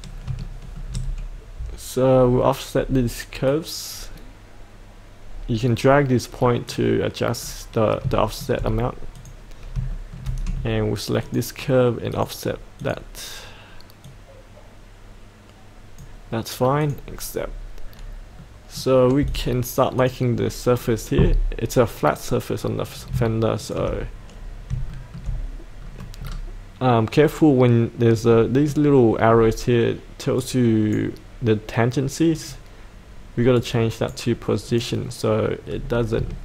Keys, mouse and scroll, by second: 0.4 shift+middle click, 1.1-2.2 scroll down 1, 3.5-7.4 drag, 8.2 shift+middle click, 9.1 click, 9.5 scroll up 1, 9.9 shift+middle click, 11.2-16.5 drag, 17.3-18.3 scroll up 1, 18.3 middle click, 19.3 click, 20.7-22.9 scroll down 1, 22.9 click, 23.6 ctrl+click, 24.4-24.7 scroll up 1, 24.9 shift+middle click, 25.8 scroll down 1, 28.3 middle click, 29.3-29.7 scroll up 1, 30.4-31.7 right drag, 32.3 click, 34.7 click, 35.6-36.0 scroll up 1, 36.3 shift+middle click.